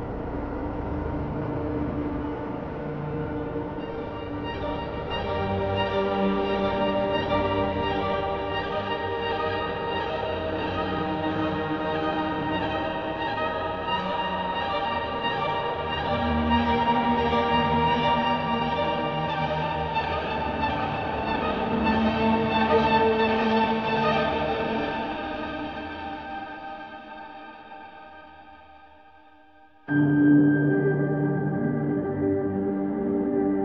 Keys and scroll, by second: 1.4-2.8 typing, 6.1 ctrl+KP_Add, 6.4 space, 8.7 space, 9.4 space, 10.2 ctrl+KP_Subtract, 10.4 space, 12.2 space.